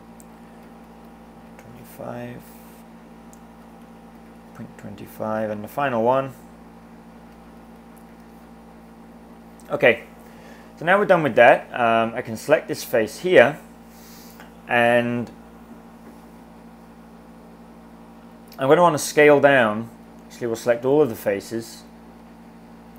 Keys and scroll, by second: 0.4-1.9 typing, 3.2-4.6 typing, 7.1-8.5 typing.